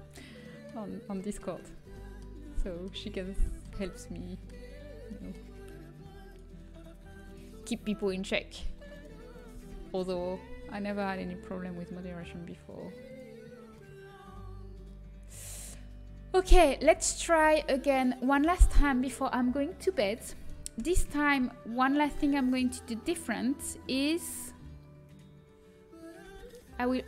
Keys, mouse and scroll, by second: 0.4-2.0 middle drag, 9.4 g, 13.3 middle click, 13.7 middle click, 13.9 middle click, 14.5 middle click, 14.6 middle click, 15.1 middle click, 16.1 middle click, 16.7 a, 17.4 a, 20.8 Tab, 24.5 click.